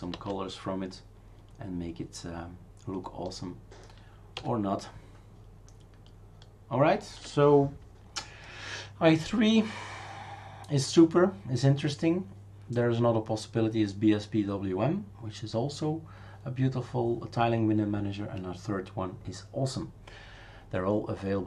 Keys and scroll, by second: 0.2 alt+shift+n, 4.4 alt+shift+u.